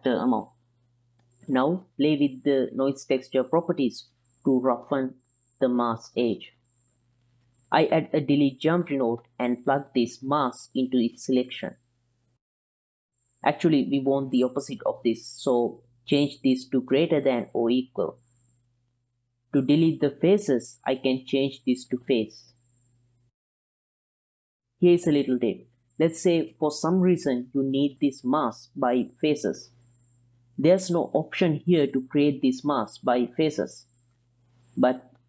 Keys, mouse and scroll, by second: 1.2 click, 2.5-3.8 drag, 6.0 click, 7.3 middle click, 8.0 click, 8.5 middle click, 8.7 shift+a, 10.6 click, 11.0 click, 11.5 click, 12.4 ctrl+shift+click, 13.0-14.2 middle drag, 13.0 z, 14.6 ctrl+middle click, 15.5 ctrl+click, 16.0-16.4 drag, 16.8-17.3 drag, 17.8 click, 18.2-18.8 drag, 18.9 ctrl+drag, 20.8 ctrl+shift+click, 22.8-23.5 drag, 24.3 ctrl+shift+click, 24.8 ctrl+click, 25.1-27.2 drag, 27.4 ctrl+click, 28.3 ctrl+click, 30.3 m, 30.8 middle click, 30.9 middle click, 31.7 middle click, 33.2 middle click, 33.5 click, 33.8 click, 34.6-35.2 middle drag.